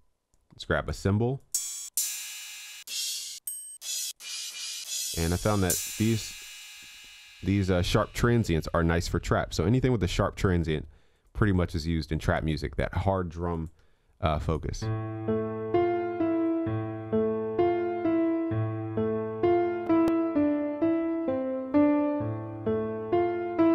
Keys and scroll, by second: 13.9 ctrl+s.